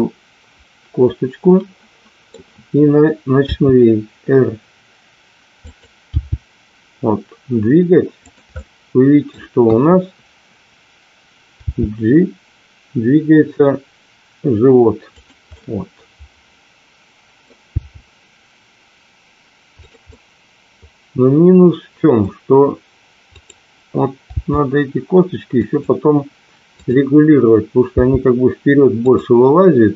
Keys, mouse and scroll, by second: 0.0-2.2 middle drag, 3.5 r, 6.0 g, 8.6-9.3 middle drag, 9.6 KP_1, 11.9 g, 15.6-17.5 middle drag, 17.8 g, 20.2-22.1 middle drag, 22.1-23.3 scroll down 1, 23.3 click, 24.2 g, 27.8 g.